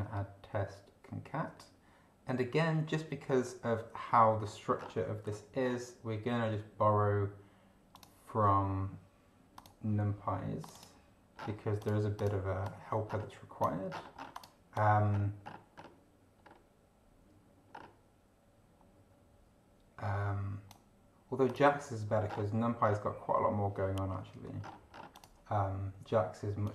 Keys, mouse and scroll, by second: 4.7 scroll down 2, 5.6 scroll up 2, 7.9 click, 9.5 click, 10.6 click, 11.3 scroll down 2, 11.8 click, 12.1 click, 12.6 click, 13.1 scroll up 1, 13.9-14.3 scroll down 1, 14.3 click, 14.7 click, 15.1 scroll up 1, 15.7 scroll up 1, 16.4 scroll up 2, 17.7 scroll up 2, 21.5 click, 22.3 scroll down 2, 22.8-23.1 scroll down 2, 24.6-25.1 scroll down 2, 25.1 click, 26.6 click.